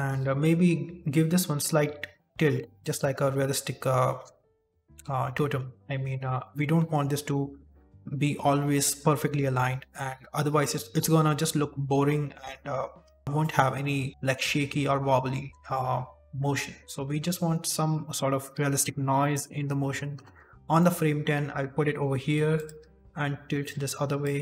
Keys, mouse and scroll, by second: 0.4 scroll up 4, 1.3 r, 4.8 i, 5.9-6.3 scroll down 3, 6.3 shift+middle click, 16.3 middle click, 16.7-17.0 scroll down 2, 17.0 shift+middle click, 18.5 click, 20.0 KP_1, 20.7 shift+middle click, 20.9-21.3 shift+scroll up 3, 21.3 g, 22.7 r, 23.7 g.